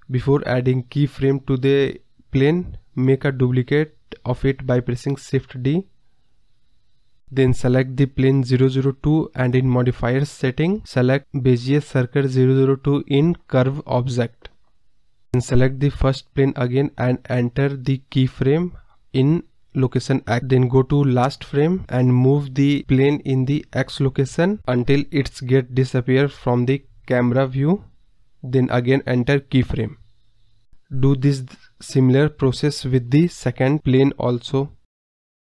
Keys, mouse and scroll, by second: 5.9-7.9 scroll down 5, 6.0 middle drag, 8.6 shift+d, 10.3 click, 12.1-13.3 drag, 13.3 scroll down 2, 13.4-15.1 middle drag, 15.4 scroll up 2, 15.8 scroll down 2, 16.2-16.6 middle drag, 16.6 click, 17.1 KP_0, 17.5-18.1 scroll down 2, 18.6 click, 19.8 click, 20.4-23.6 drag, 29.5 click, 32.5 click, 32.8 scroll up 1, 33.6-35.5 drag.